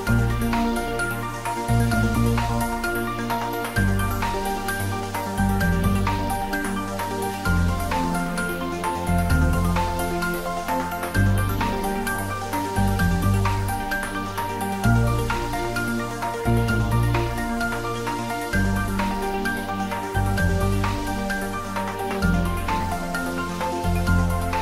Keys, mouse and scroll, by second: 0.1-2.0 middle drag, 2.4 Tab, 3.0-3.5 scroll down 1, 3.5-6.7 middle drag, 6.9-8.8 scroll up 1, 8.8 click, 9.6-11.4 scroll down 1, 14.4 shift+click, 20.8 click.